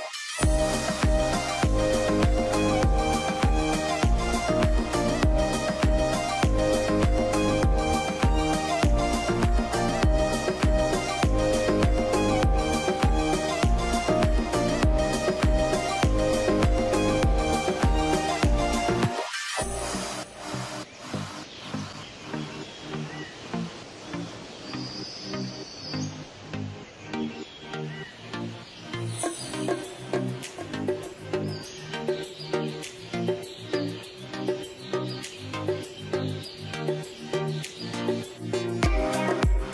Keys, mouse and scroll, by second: 0.9 middle click, 1.2 t, 1.3 z, 2.3 scroll up 1, 3.1 middle click, 3.3 scroll down 1, 3.8-4.2 scroll up 1, 4.2 middle click, 6.8 double click, 15.9 Escape, 16.3 middle click, 21.8 middle click, 22.1-22.6 scroll up 1, 22.6 middle click, 27.6 middle click, 30.0 middle click, 33.7 middle click, 33.7 scroll down 1, 34.1 scroll up 1, 35.0 middle click, 37.1 double click, 37.7 scroll up 1, 38.4 scroll down 1, 39.4 alt+middle click.